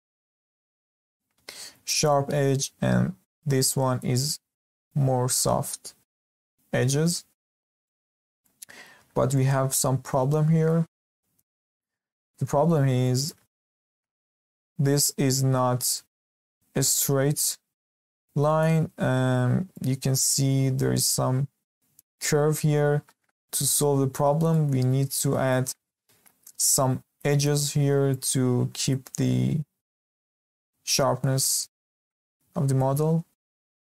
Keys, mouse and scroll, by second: 6.9 Escape, 7.5-7.8 scroll down 2, 7.8-12.8 shift+middle drag, 12.8 scroll up 1, 13.0-23.6 shift+middle drag, 23.6 Escape, 23.9-24.5 scroll down 10, 24.5-24.8 shift+middle drag, 24.8-25.3 scroll up 1, 25.3-31.8 shift+middle drag, 31.8 Escape, 32.3-32.7 scroll down 2, 32.7-33.9 shift+middle drag.